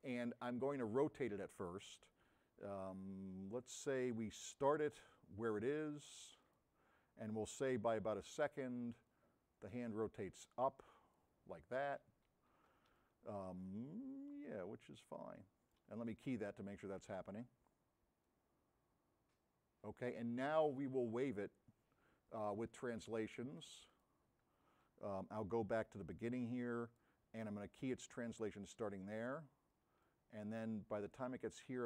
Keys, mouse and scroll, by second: 1.3 click, 2.9 middle click, 6.5 click, 11.6 middle click, 13.0-14.5 right drag, 13.0 s, 16.9 click, 18.3-20.4 drag, 21.1 middle click, 28.3 click.